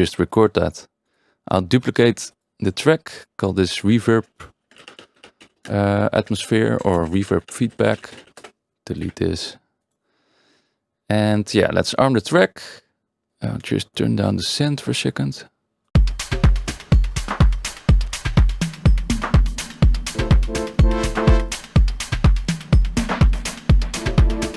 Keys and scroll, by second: 3.9 ctrl+r, 4.4-8.6 typing, 9.0 Delete, 15.9 space.